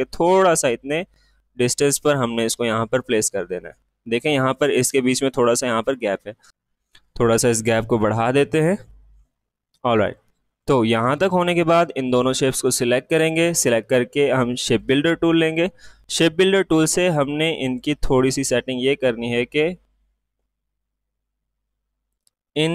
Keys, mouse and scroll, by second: 2.3 typing, 6.5 ctrl+shift+z, 7.1 Right, 10.0 click, 10.0-13.0 drag, 14.6 click, 17.6-22.2 drag.